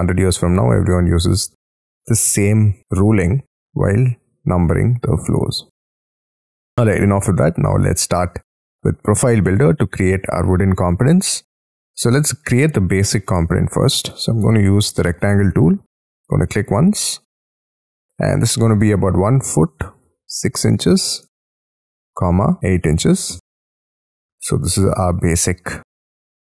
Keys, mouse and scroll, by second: 3.5 middle click, 6.2 middle click, 6.8-7.2 scroll down 5, 7.2 scroll up 6, 7.7 Escape, 8.5 middle click, 9.0-9.3 scroll down 7, 9.5-10.6 scroll up 24, 10.7 middle click, 12.0-12.8 scroll down 19, 13.1 middle click, 14.1 r, 15.0-16.6 scroll up 12, 19.0-23.0 typing, 23.3 Return, 24.0 space, 24.4-25.5 scroll up 11, 25.5 scroll up 2, 25.7 middle click.